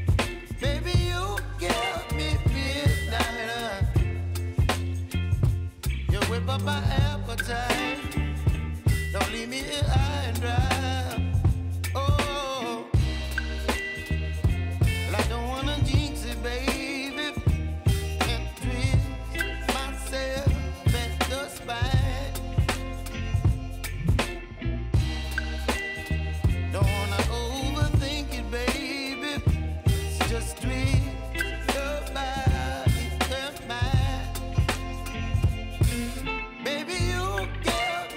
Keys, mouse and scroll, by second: 5.4 ctrl+alt+Home, 7.3-13.2 drag, 15.2 v, 15.7-38.1 drag.